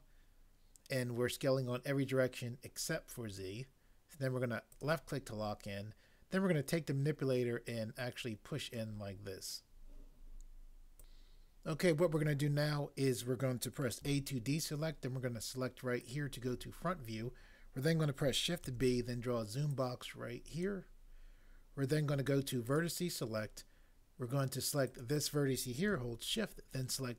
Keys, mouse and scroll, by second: 4.7 click, 11.0 click, 14.0 a, 16.1 click, 18.7 b, 19.7 click, 22.7 click.